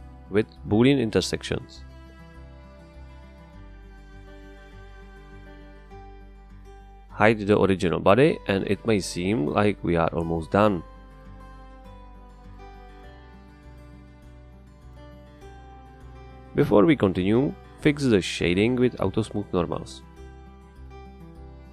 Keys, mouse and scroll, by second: 1.9-3.1 drag, 6.7 click, 7.0 KP_0, 7.0 Return, 10.0 click, 12.6 space, 12.7 space, 16.0 middle click, 19.0 click, 20.1 click, 20.6 click.